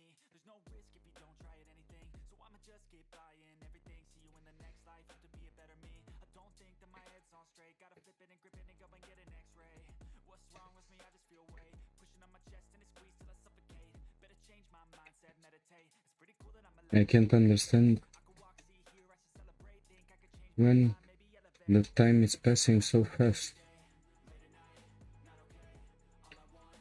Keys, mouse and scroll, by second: 0.0-2.7 middle drag, 2.7 ctrl+z, 3.3-4.6 shift+middle drag, 4.6 shift+click, 5.1-8.2 middle drag, 8.2-8.7 scroll down 2, 8.7-10.0 shift+middle drag, 10.0 Tab, 10.3 scroll down 2, 10.6-12.5 middle drag, 12.5-13.0 scroll down 1, 13.0-14.1 scroll up 1, 14.1-14.6 scroll up 3, 14.6-16.8 shift+middle drag, 16.8-17.2 scroll down 2, 17.2-21.2 shift+middle drag, 21.2-21.5 scroll up 3, 21.5-23.7 shift+middle drag, 23.7 click, 24.1 Tab, 24.7 click, 26.2 ctrl+click.